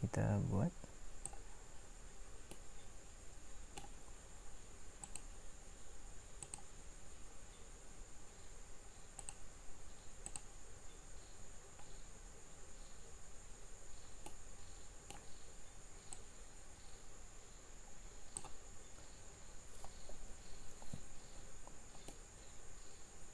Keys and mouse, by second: 11.3-14.5 middle drag, 14.7-16.1 middle drag, 18.9-22.0 middle drag.